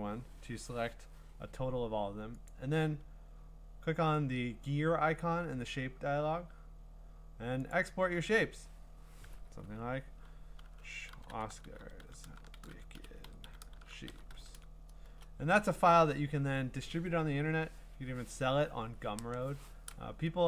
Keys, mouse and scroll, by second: 2.5 click, 3.8 click, 7.7 click, 10.9-15.0 typing.